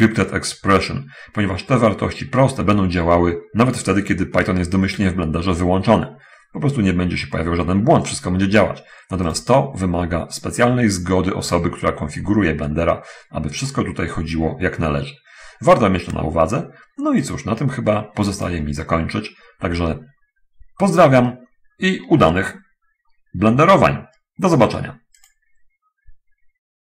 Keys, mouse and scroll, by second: 14.0-14.7 scroll down 1, 14.8-15.5 scroll up 3, 15.5-17.7 scroll down 2, 17.7-18.8 drag, 19.2-20.0 ctrl+scroll up 2, 21.5-22.7 ctrl+scroll up 1, 22.9-23.5 ctrl+middle drag, 25.6 click.